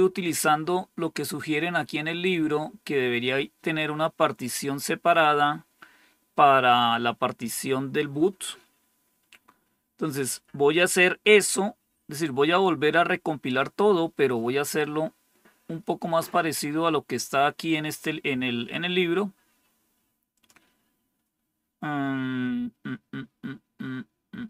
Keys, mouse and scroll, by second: 20.2 click.